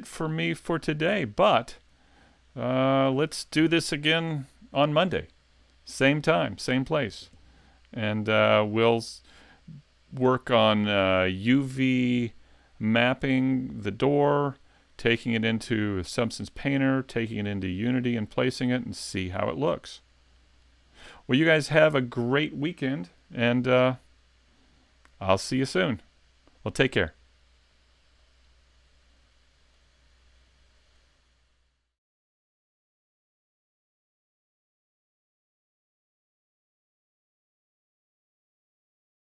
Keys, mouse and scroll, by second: 1.9 scroll down 2, 2.4 middle click.